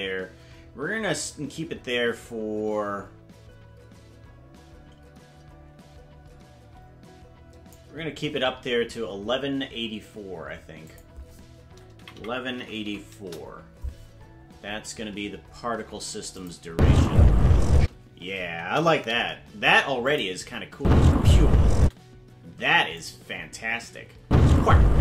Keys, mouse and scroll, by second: 10.9-13.9 drag, 12.1 KP_1, 16.4 click, 16.7 space, 18.6 KP_0, 20.1 click, 20.7 space, 23.0 click, 24.2 space.